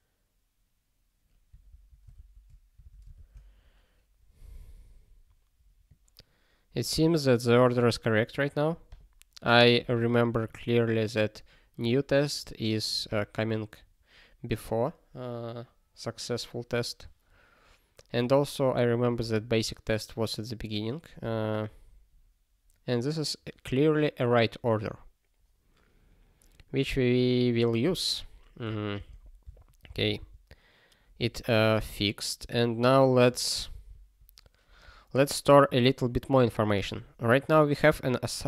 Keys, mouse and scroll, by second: 1.7 super+o, 2.1 alt+>, 28.3 click, 28.9 ctrl+space, 29.0 ctrl+a, 29.5 ctrl+w, 29.8 ctrl+space, 29.9 ctrl+n, 30.2 ctrl+n, 31.2 ctrl+g, 33.7 ctrl+s.